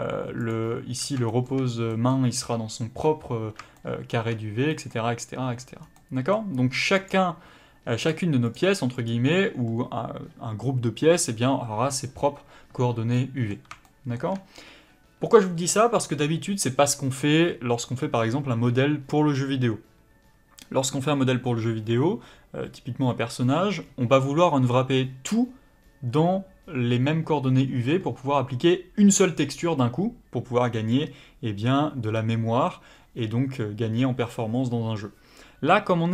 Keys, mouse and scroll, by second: 0.5 click, 0.9 scroll up 1, 1.3 shift+middle click, 5.8 scroll down 1, 5.9 middle click, 7.0 click, 13.1 middle click.